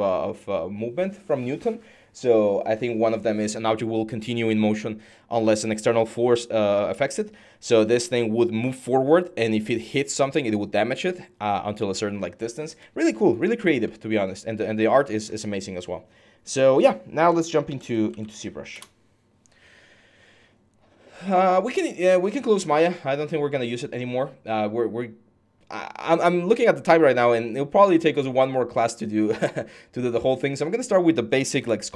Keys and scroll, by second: 17.6-19.3 typing.